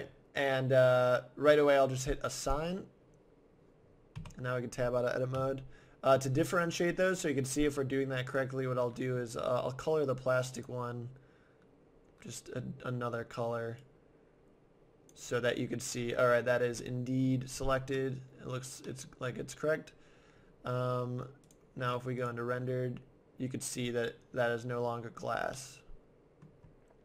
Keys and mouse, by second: 2.4-4.0 drag, 4.2 Tab, 5.3 z, 8.3-10.0 drag, 10.6-12.2 drag, 16.3-20.6 middle drag, 21.5-22.6 drag, 25.6 middle click, 26.1 middle click.